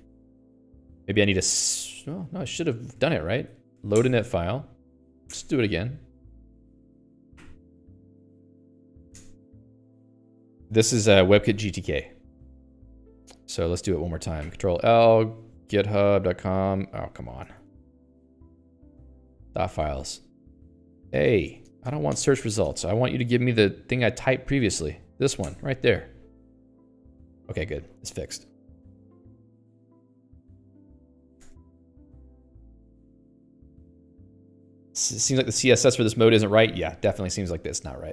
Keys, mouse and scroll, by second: 0.3 Escape, 0.4 Escape, 0.5-1.9 typing, 2.6 ctrl+s, 29.3 ctrl+s.